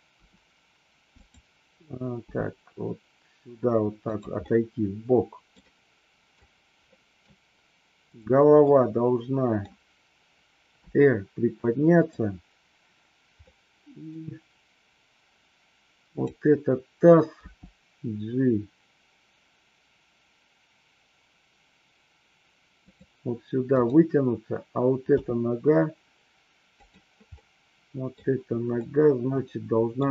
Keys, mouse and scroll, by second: 0.1 r, 1.1 click, 2.2 g, 4.5 scroll up 1, 4.6-6.3 middle drag, 7.0 middle click, 8.6-9.6 middle drag, 10.7 r, 13.3-14.1 middle drag, 17.3 g, 22.8 click, 23.6 click, 25.0 g, 26.7 click, 27.3-28.1 middle drag, 28.8-30.0 middle drag.